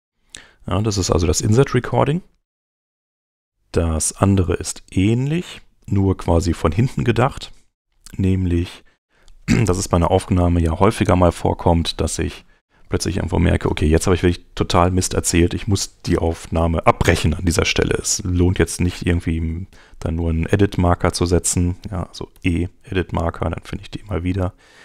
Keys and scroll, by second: 22.3 e.